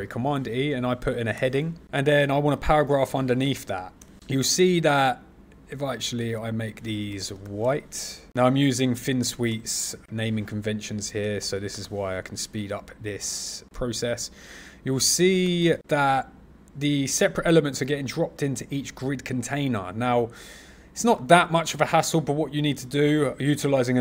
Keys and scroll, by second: 2.9 super+e, 9.5 super+z.